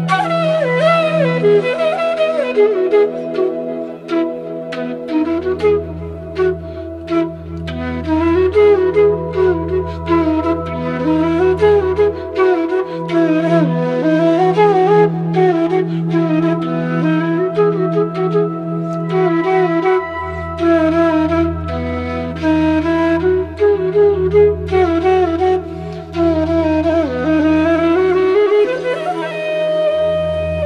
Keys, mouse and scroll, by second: 0.4 right click, 1.1-4.4 drag, 4.4 click, 4.5 click, 5.6 ctrl+shift+[, 6.1 ], 7.8-22.7 drag, 22.7 ctrl+z, 23.0 click, 24.7 click, 24.9 scroll down 1, 25.3 scroll up 1, 26.5 click, 27.6-28.4 scroll down 1, 28.4-30.6 drag.